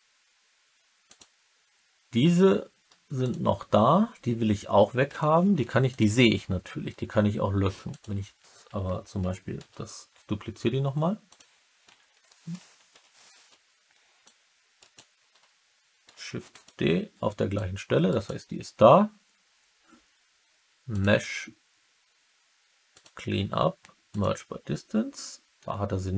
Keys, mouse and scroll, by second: 1.0 click, 3.1 shift+click, 5.4 2, 5.8 click, 7.8 click, 9.5 shift+d, 11.2 click, 12.8 ctrl+z, 14.2 click, 14.7 middle click, 16.0 shift+d, 16.4 click, 17.5 click, 18.0 middle click, 20.9-24.2 drag.